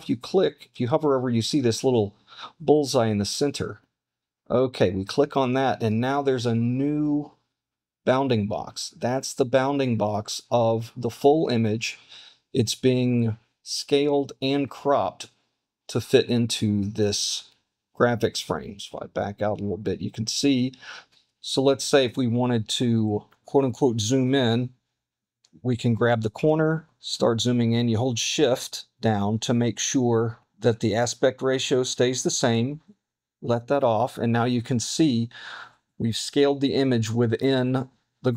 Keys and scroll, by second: 18.6 super+-.